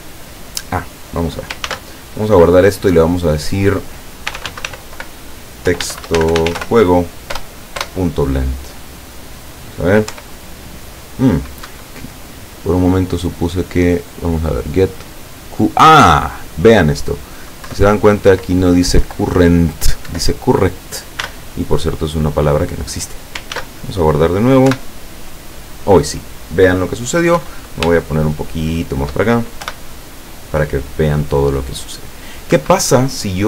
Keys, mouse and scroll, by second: 1.7 ctrl+s, 3.4 click, 4.3 t, 4.5 x, 4.7 t, 5.7-6.6 typing, 7.3 Return, 10.1 p, 11.8 Escape, 16.3 click, 17.7 Left, 18.3 Right, 19.1 Left, 19.6 z, 20.1 Delete, 20.7 z, 21.3 n, 23.6 ctrl+s, 23.8 ctrl+click, 24.7 p, 27.5 Escape, 28.1-29.3 shift+middle drag, 29.6 p, 32.6 Escape.